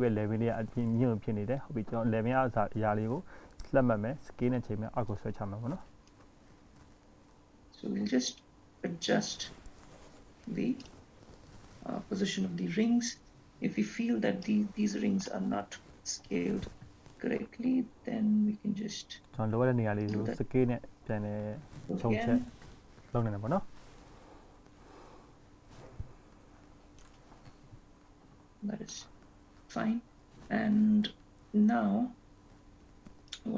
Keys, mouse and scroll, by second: 1.1 click, 1.8 click, 3.5 click, 5.7 click, 7.1 click, 12.8-13.8 scroll up 3, 13.8-14.7 scroll up 1, 14.7 click, 14.7-15.6 scroll up 1, 17.1 s, 21.9 click, 26.0 s, 26.8 click, 27.9 s.